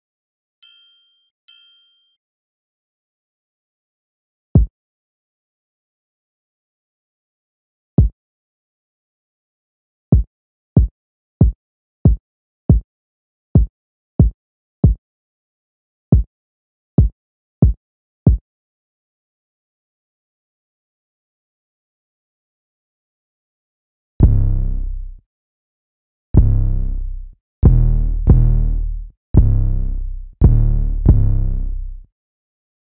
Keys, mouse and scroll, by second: 2.8 F1, 19.1 F1, 20.2 F1.